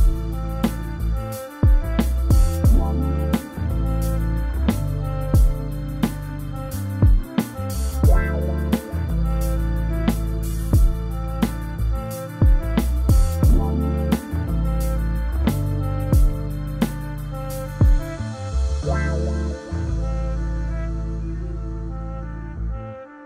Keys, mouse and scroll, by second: 2.1 scroll down 1, 4.0 y, 4.2 middle drag, 4.5 scroll up 2, 4.8 g, 6.3 click, 6.7 g, 8.2-9.2 middle drag, 9.2 scroll up 1, 9.5 middle click, 10.4 click, 10.6 g, 12.6 click, 13.0 g, 21.0 scroll down 2, 21.2 middle click, 21.4 Tab, 21.7-22.5 middle drag, 22.5 Tab, 22.6-23.1 middle drag, 23.1 click.